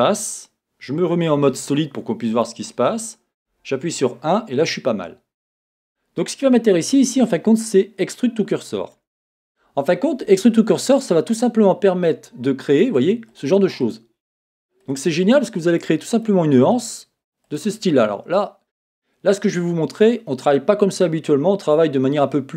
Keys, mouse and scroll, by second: 1.4 z, 3.5 KP_1, 4.3-5.8 scroll up 2, 5.8-6.7 scroll up 1, 6.7-12.8 drag, 13.3 click, 13.9 click, 14.4 click, 14.9 click, 15.3 click, 15.7 click, 16.2 click, 16.8 click, 17.5 click.